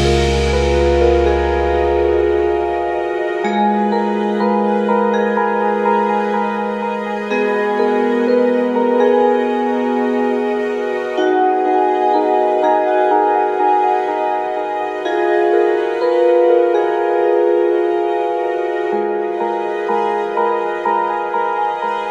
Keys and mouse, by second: 5.4 click, 13.5 click, 14.6 click, 14.8 click.